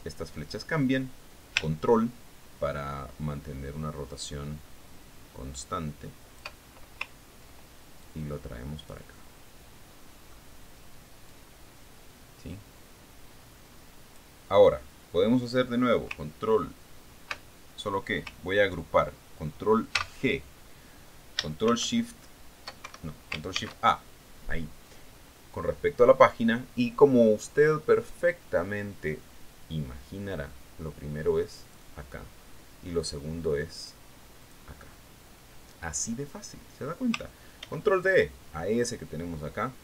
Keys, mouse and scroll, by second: 0.3-0.7 ctrl+scroll up 2, 0.7-4.3 ctrl+middle drag, 4.3-8.2 ctrl+drag, 9.6-10.5 drag, 10.5-12.3 middle drag, 12.8-15.7 drag, 21.4 ctrl+g, 23.2 ctrl+shift+s, 24.3 ctrl+shift+Escape, 25.0 ctrl+shift+a, 33.2 click, 35.9 click, 39.1 ctrl+d, 39.5-39.8 ctrl+drag.